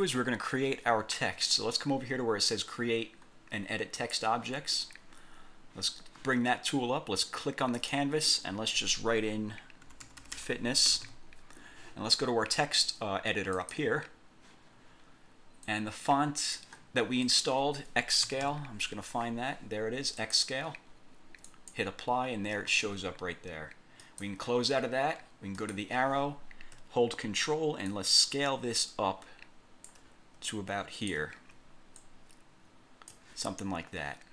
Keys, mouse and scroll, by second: 0.2 click, 1.1 scroll down 2, 4.2 click, 7.9 click, 9.7-11.0 typing, 13.7 click, 15.8 click, 17.4 click, 18.1-19.0 typing, 20.3 click, 21.6 click, 24.1 click, 25.7 click, 28.0-30.2 ctrl+drag, 30.6 ctrl+click, 32.1-33.4 ctrl+drag, 33.9 scroll down 2.